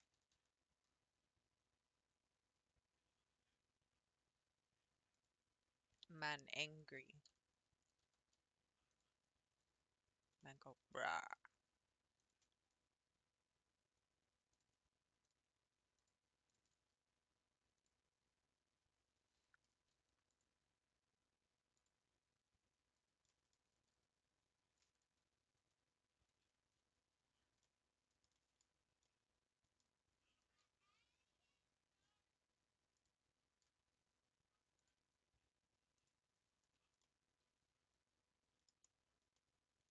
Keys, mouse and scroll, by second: 0.5 g, 6.3 Left, 6.9 l, 8.0 g, 11.6 r, 14.6 click, 16.1 shift+click, 16.5 shift+click, 19.6 3, 20.4 click, 21.9 click, 23.9 a, 25.6 Tab, 26.8 Tab, 27.3 scroll up 3, 27.6-28.8 middle drag, 28.8 scroll up 3, 29.0-33.0 middle drag, 36.0 click, 36.6 Tab, 37.0-38.7 middle drag, 38.7 scroll down 1, 38.8-39.9 middle drag.